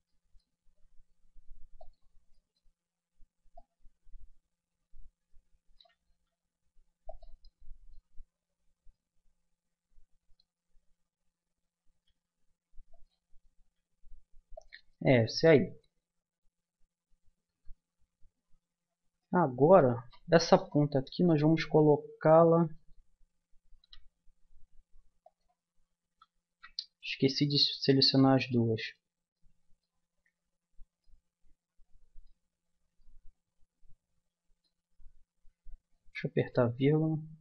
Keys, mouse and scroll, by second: 0.6 s, 3.5-5.3 drag, 6.1 s, 7.4-9.6 drag, 9.6-14.8 middle drag, 11.9 s, 13.6 s, 14.9 click, 16.6 Tab, 17.5 Tab, 23.8 g, 26.5 ctrl+z, 26.7 middle click, 28.5-34.8 middle drag, 35.9 KP_Decimal.